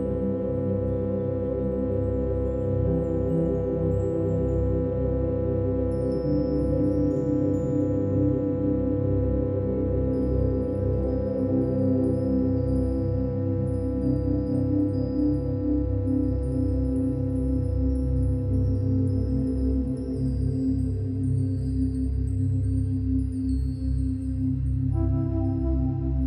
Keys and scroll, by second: 2.9 ctrl+e, 4.9 ctrl+=, 5.0 ctrl+-, 5.1 ctrl+=, 5.2 ctrl+-, 7.6 ctrl+e, 9.1 ctrl+e, 9.9 space, 13.7 ctrl+-, 13.7 ctrl+=, 14.1 space, 19.1 ctrl+-, 19.2 ctrl+=, 19.5 space.